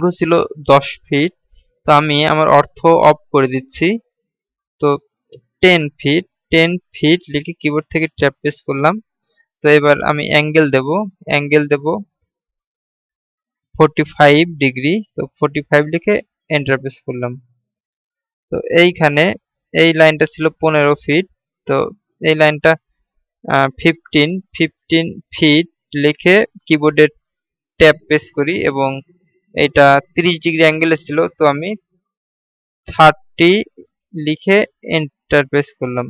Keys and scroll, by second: 3.1 F8, 8.6 Tab, 28.2 Tab.